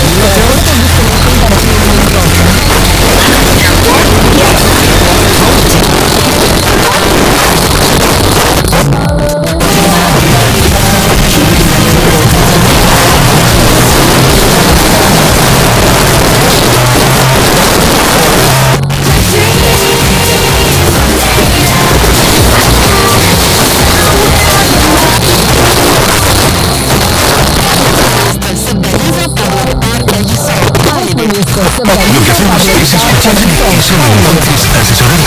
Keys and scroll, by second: 5.8 Page_Down, 15.6 Page_Down, 25.1 Page_Down.